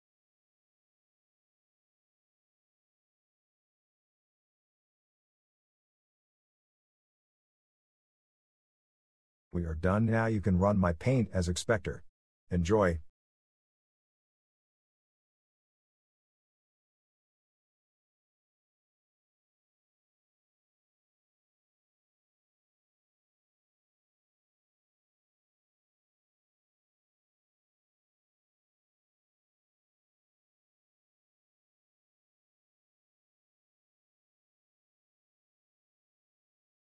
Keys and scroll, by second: 4.1 typing, 25.0-25.7 typing.